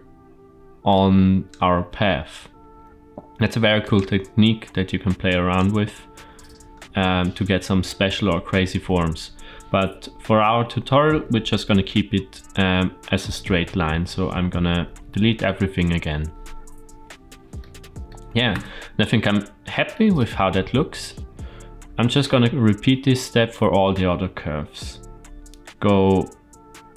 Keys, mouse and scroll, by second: 0.7 click, 1.6 e, 5.1 click, 6.8-8.2 scroll up 1, 8.2-9.1 scroll up 1, 9.1-10.0 scroll down 1, 10.0-11.0 scroll down 2, 11.6 ctrl+t, 12.1 ctrl+t, 12.3 ctrl+t, 13.8 ctrl+z, 14.0 ctrl+z, 14.2 ctrl+z, 14.4 ctrl+z, 14.6 ctrl+z, 14.8 ctrl+z, 15.2 ctrl+z, 15.4 ctrl+z, 17.4 middle click, 18.4 Tab, 19.0-19.9 shift+middle drag, 20.8-21.3 middle drag.